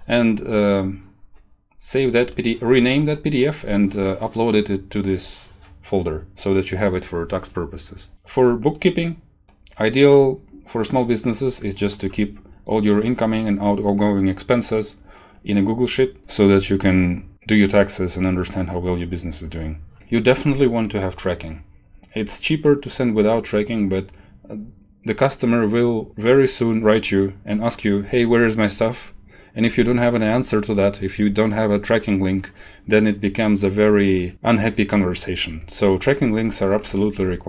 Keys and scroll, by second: 36.4 Right, 37.0 shift+Home.